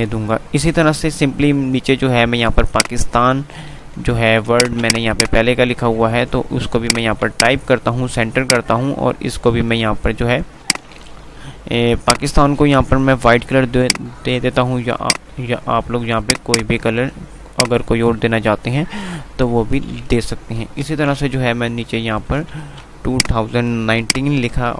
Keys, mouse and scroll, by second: 0.2 F3, 2.7-4.3 drag, 4.8 c, 5.1 click, 7.1 c, 7.6 click, 11.6 typing, 13.0 F3, 13.8 click, 14.8 F2, 16.3-19.0 drag, 19.0 F2, 19.7 click, 20.0 F2, 20.8 Page_Up, 22.6 click, 22.8 click.